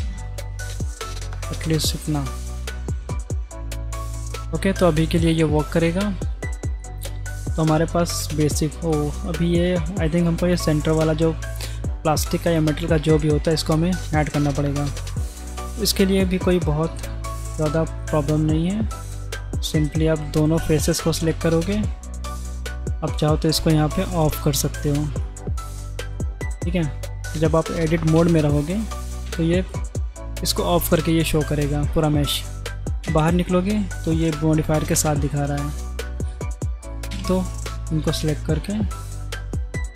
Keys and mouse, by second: 1.2-4.1 middle drag, 5.1 middle click, 6.0 middle click, 6.8 shift+middle drag, 7.4-8.1 middle drag, 8.9 middle click, 9.4 shift+click, 12.9 middle click, 13.7-14.2 middle drag, 15.0-15.5 shift+middle drag, 15.7 Tab, 15.9 middle click, 16.9 3, 18.0 middle click, 24.3 click, 25.2 click, 26.0 click, 28.3 Tab, 29.4 Tab, 33.0 Tab, 36.4 middle click, 37.2 Tab, 37.5 middle click, 39.2 `, 39.7 middle click.